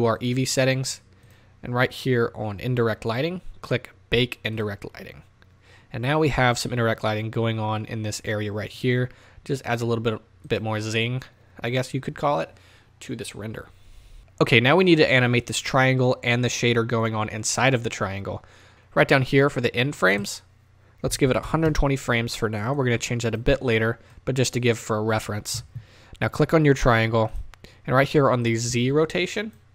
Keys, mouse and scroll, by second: 5.1-8.9 drag, 10.4 click, 28.5-29.7 drag.